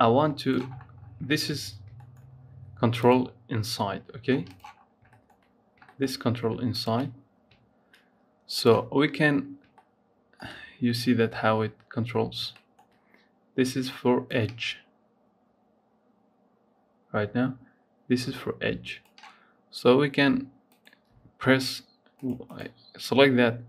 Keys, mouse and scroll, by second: 0.5-2.0 scroll up 11, 1.2 shift+middle click, 2.0 shift+middle click, 2.8 click, 4.3-6.6 drag, 7.2-8.3 scroll up 2, 8.3 click, 8.9-9.3 scroll up 7, 9.6 shift+middle click, 10.2 shift+scroll down 1, 12.1 scroll down 1, 12.4 shift+middle click, 12.9-14.1 scroll up 1, 14.1-17.1 drag, 20.5 click, 22.0 click, 22.3 click.